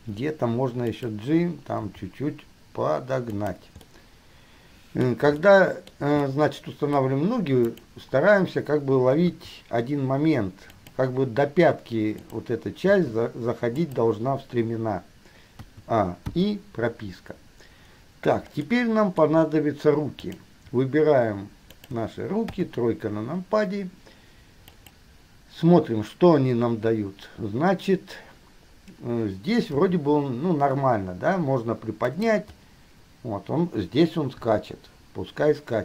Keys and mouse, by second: 0.1 r, 2.0 g, 4.1-5.5 middle drag, 5.9-6.2 shift+middle drag, 6.6-7.6 middle drag, 8.0 click, 9.5 g, 12.5 click, 13.1 g, 15.9 a, 16.5 i, 18.9-20.7 drag, 21.9 shift+click, 22.7 KP_3, 30.0 g, 34.6 i.